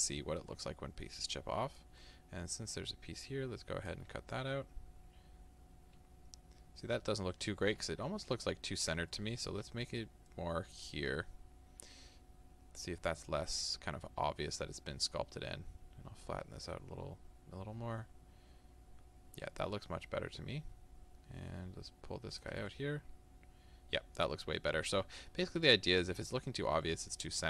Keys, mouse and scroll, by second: 4.4-10.5 middle drag, 8.1 ctrl+z, 10.5-22.7 ctrl+drag, 22.7-27.4 middle drag.